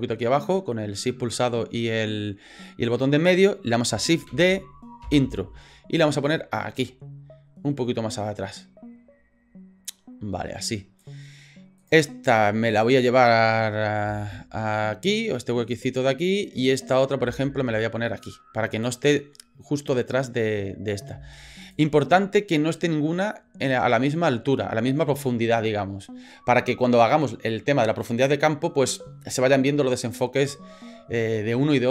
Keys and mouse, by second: 1.6 shift+middle click, 4.3 shift+d, 6.0-11.0 drag, 11.8 right click, 12.7 right click, 14.0 g, 16.8 right click, 17.2 g, 21.1 g.